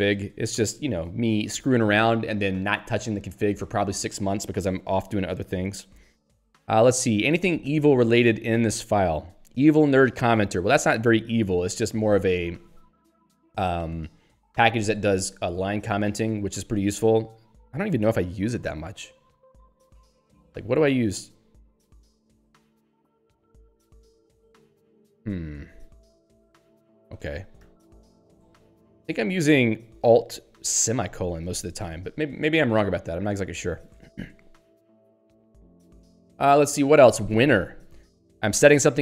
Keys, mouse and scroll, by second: 7.6 ctrl+s, 8.0-9.0 typing, 19.9 ctrl+g, 21.9 alt+/, 23.7 ctrl+/, 26.0 ctrl+;, 26.7 ctrl+g, 27.6 alt+;, 31.4 ctrl+/, 32.6 ctrl+s, 33.7-34.6 typing, 36.0 Down.